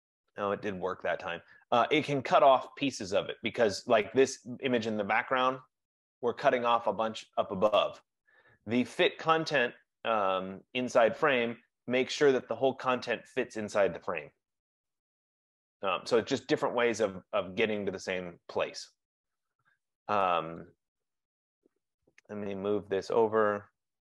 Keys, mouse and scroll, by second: 4.3 click, 5.8 click, 6.0 click, 8.3 click, 10.1 F15, 10.3 click, 19.6 click, 20.8 click.